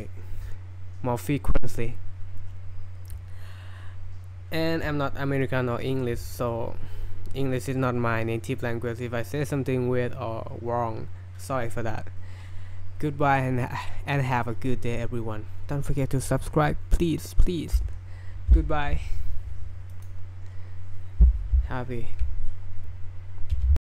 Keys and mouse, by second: 19.9-20.9 drag, 23.6 alt+-.